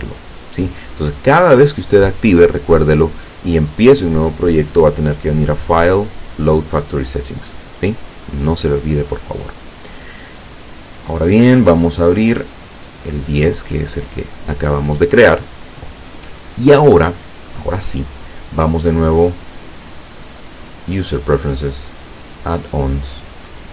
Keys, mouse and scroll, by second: 5.3 click, 6.7 click, 9.9 click, 12.8 click, 19.3 click, 21.0 click, 22.4 click.